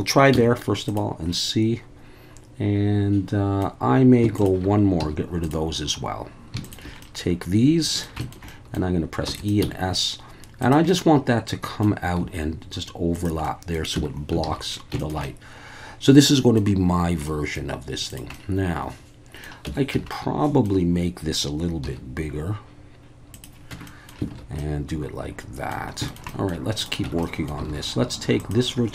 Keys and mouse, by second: 0.3 x, 1.3-3.6 middle drag, 5.0 x, 7.0-8.0 middle drag, 8.2 shift+middle click, 8.5 middle click, 9.3 e, 9.4 click, 9.6 s, 10.6 click, 10.9 middle click, 12.2 s, 13.1 click, 13.5 middle click, 13.9 Tab, 14.4 alt+a, 15.0 shift+middle click, 15.2-16.6 middle drag, 17.3 middle drag, 18.1 click, 18.3-19.4 middle drag, 19.6 Tab, 19.9 a, 20.1 middle click, 21.8 s, 23.3 click, 23.7 Tab, 23.8 middle drag, 24.3 alt+a, 24.6-25.7 middle drag, 26.1 shift+middle click, 26.3 middle drag, 27.0 Tab, 27.2 middle click, 27.7 alt+a, 28.4 click.